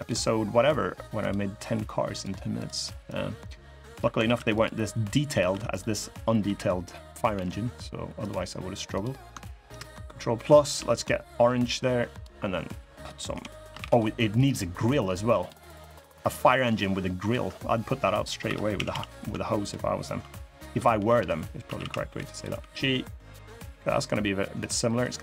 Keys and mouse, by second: 0.9 click, 1.9 click, 2.9 click, 4.0 ctrl+r, 5.2 3, 5.4 click, 7.1 l, 7.1 g, 8.7 click, 9.4 ctrl+KP_Add, 10.5 g, 13.0 l, 13.5 shift+d, 14.1-15.2 drag, 15.4 middle click, 16.6 click, 18.2 3, 18.5 a, 18.6 a, 19.4 alt+shift+click, 20.4 click, 20.7-22.2 typing, 24.7 click, 25.1 middle click.